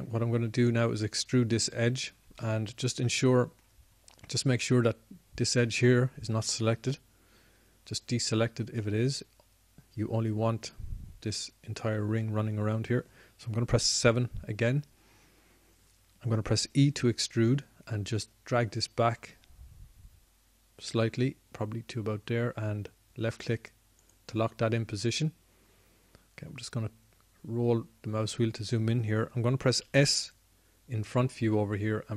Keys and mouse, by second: 4.1 middle click, 4.7-9.5 middle drag, 15.6 KP_7, 18.4 e, 31.5 s.